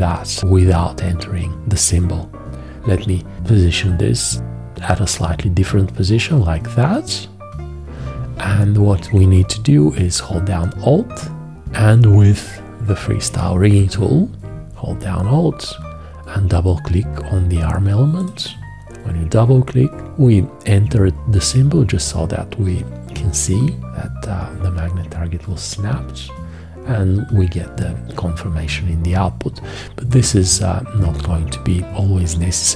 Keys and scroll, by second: 2.8 g, 13.3 F4.